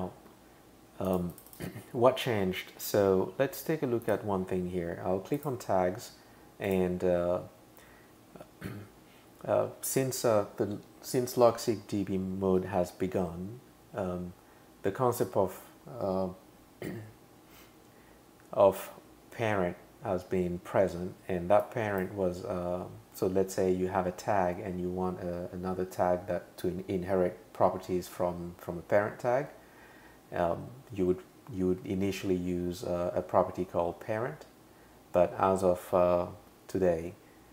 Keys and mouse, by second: 1.1 click, 1.3 click, 1.5 click, 4.0 click, 5.3 click, 6.7 click, 21.6 click.